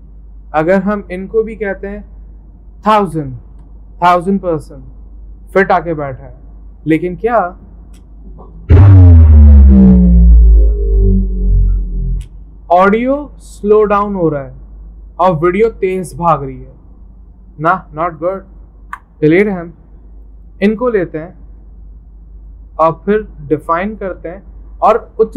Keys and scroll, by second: 2.7-4.0 typing, 18.8 Delete.